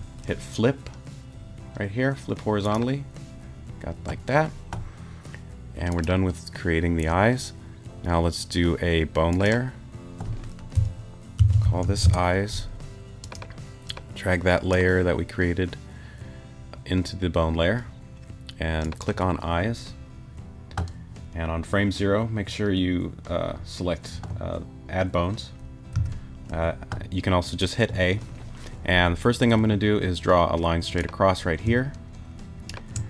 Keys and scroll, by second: 11.1-12.3 typing, 25.9 a.